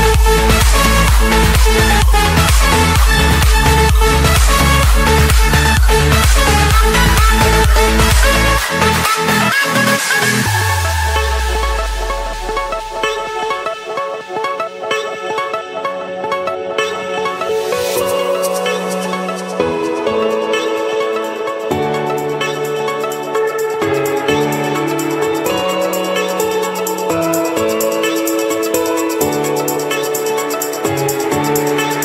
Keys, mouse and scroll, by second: 0.3-1.4 scroll up 2, 2.0 click, 4.3 click, 5.0 scroll down 1, 6.1 scroll up 1, 6.1-6.9 scroll, 6.9-7.4 scroll, 10.0 Return, 12.0 click, 14.1 click, 14.5 Escape, 16.7 i, 17.7 Return, 18.5 click, 19.4 click, 20.8 click, 21.1 Escape, 22.0 click, 22.3 click, 23.6 Delete, 24.3 scroll, 24.6 scroll down 1, 25.3 scroll down 1, 26.3 click, 26.5 click, 27.8-28.3 typing, 29.0 Return, 30.4-31.4 scroll up 5, 31.8 click.